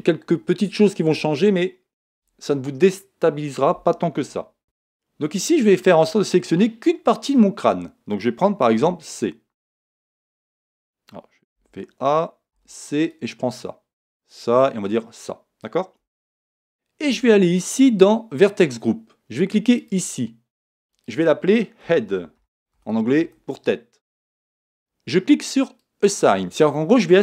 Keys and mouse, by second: 4.6 Tab, 5.3-8.8 middle drag, 8.8 c, 11.6 a, 12.5 c, 19.8-22.9 drag.